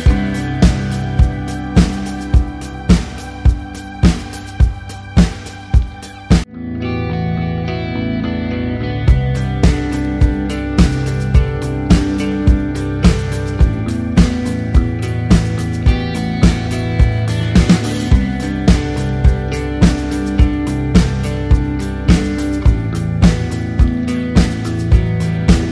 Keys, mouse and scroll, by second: 0.4 Left, 1.4 Right, 2.4 ctrl+click, 2.6 a, 3.2 click, 6.4 z, 7.1 click, 12.6-13.1 scroll up 1, 13.6 ctrl+click, 17.0 typing, 18.8 click, 20.2-21.0 typing, 21.2 shift+Right, 23.6 ctrl+Num_Lock, 25.2 ctrl+=.